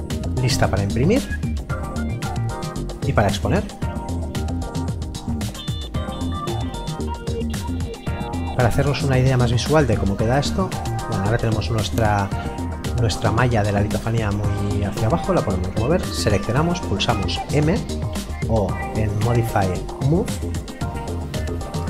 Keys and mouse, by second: 5.2 click, 15.3 click, 19.2 click, 20.4 click.